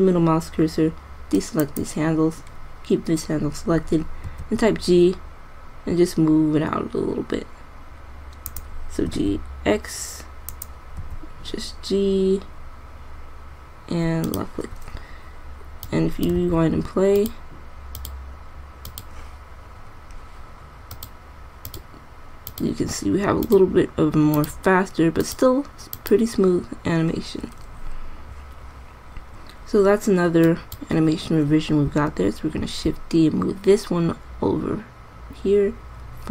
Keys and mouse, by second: 4.6 g, 9.5 g, 11.4 g, 16.2 click, 16.7 alt+a, 27.9-28.3 middle drag, 33.1 shift+d.